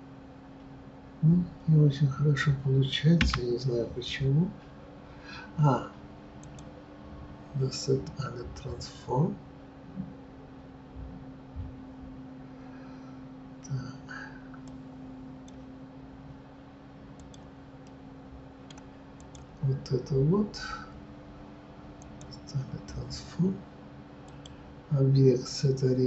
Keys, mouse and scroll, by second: 6.4-17.3 drag, 17.8-19.3 middle drag, 19.3 click, 22.0 click.